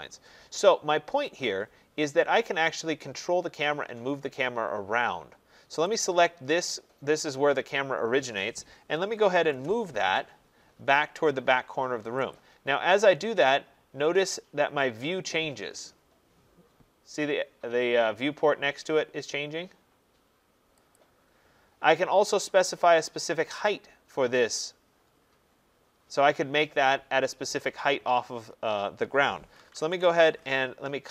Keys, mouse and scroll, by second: 1.3 middle click, 1.4 middle click, 1.4 middle click, 6.0 click, 8.7-9.9 typing, 10.6 middle click, 11.2 middle click, 12.3 click, 21.0 click, 22.4-25.3 scroll, 29.3-30.3 typing.